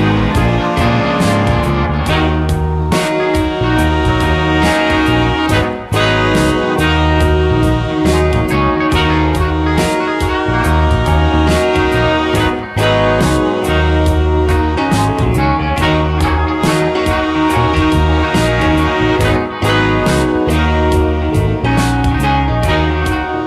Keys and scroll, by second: 17.7 space, 23.3 ctrl+z.